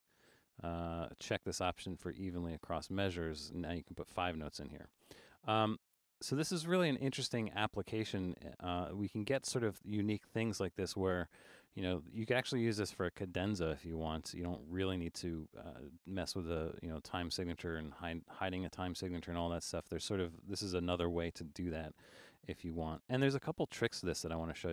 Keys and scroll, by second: 5.9 Escape, 23.0 BackSpace.